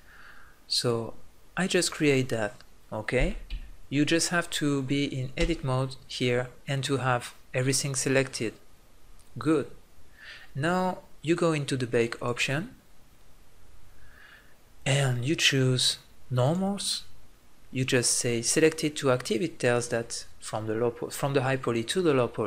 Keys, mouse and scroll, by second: 2.5-5.4 drag, 3.6 Tab, 5.4 Tab, 6.4-8.5 drag, 12.1-14.6 middle drag, 14.8-18.4 middle drag, 18.4-22.4 drag.